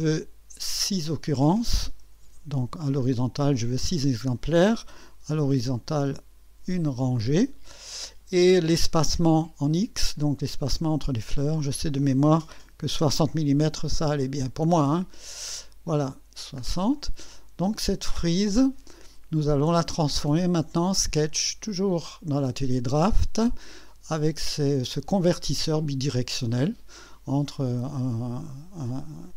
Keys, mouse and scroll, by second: 2.2 KP_6, 3.9 click, 5.9 KP_1, 11.3 click, 12.7 KP_6, 12.9 KP_0, 14.8 click, 15.8-16.2 scroll down 1, 16.4 scroll down 1, 16.9 right click.